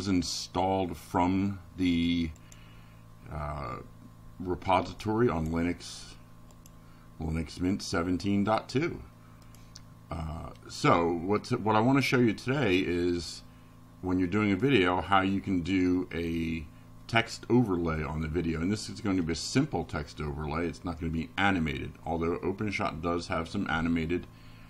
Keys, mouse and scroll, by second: 0.2 click, 2.6 click, 4.0 click, 6.7 click, 23.8 click.